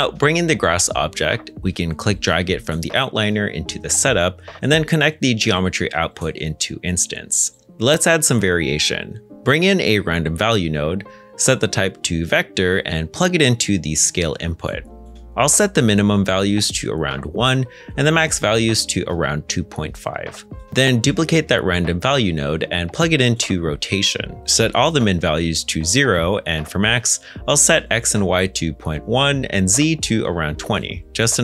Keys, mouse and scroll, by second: 0.0 middle click, 1.0-1.4 scroll up 1, 7.7 g, 9.2 x, 11.1 r, 11.4 m, 11.5 space, 11.7 Return, 16.9 1, 17.1 Tab, 19.8 2, 20.0 ., 20.2 5, 20.3 Return, 21.3 shift+d, 26.5 KP_0, 26.7 Return, 29.7 typing, 30.3 Return.